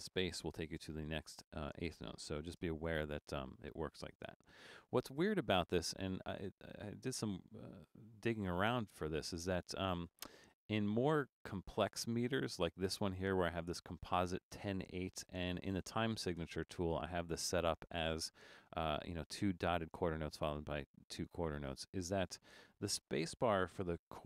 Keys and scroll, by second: 0.2 shift+e, 0.5 m, 0.8 space, 2.3 shift+g, 2.5 space, 24.1 shift+d.